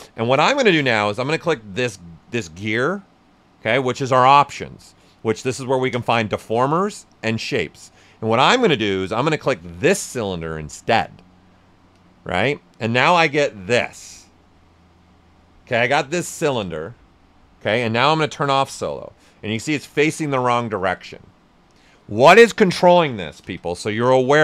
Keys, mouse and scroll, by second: 1.1 click, 11.9 click, 13.7-18.3 right drag, 18.3 click, 19.1-23.4 right drag, 23.4 ctrl+z.